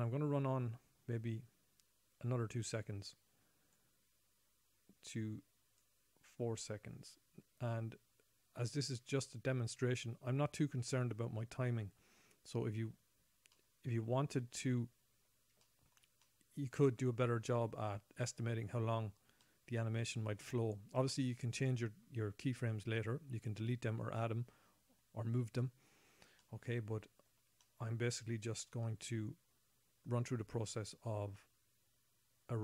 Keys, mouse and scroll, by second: 4.1 right click, 13.9 middle click, 16.0 shift+middle click, 16.6 middle click, 19.8 middle click, 26.8 middle click, 27.2 middle click, 28.0 shift+middle click, 28.7-30.4 scroll up 2.